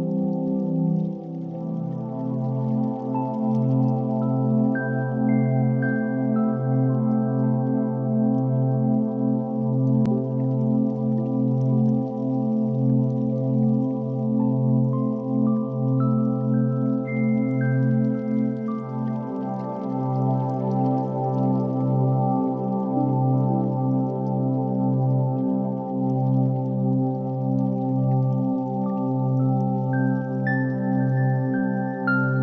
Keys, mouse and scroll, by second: 0.2 alt+z, 0.5 click, 1.6 g, 1.9 x, 4.5 click, 5.4 Tab, 5.9 shift+middle drag, 6.6 middle click, 8.3 alt+z, 8.9 Tab, 9.6 ctrl+r, 10.4 right click, 10.7 ctrl+b, 14.5 click, 14.9 3, 15.9 KP_1, 16.8 e, 18.6 click, 19.1 middle click, 19.9 1, 20.4 click, 22.4 m, 23.7 click, 24.4 middle click, 25.4 shift+click, 26.4 m, 27.2-28.3 middle drag, 29.0 click, 29.6 x, 31.3 2, 31.6 click, 31.9 x.